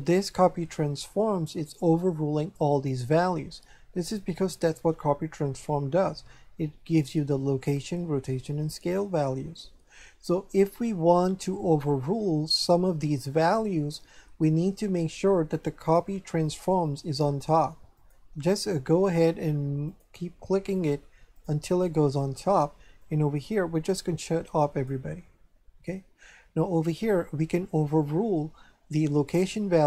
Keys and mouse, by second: 15.8 click, 18.0 click, 19.1 click, 23.0 click.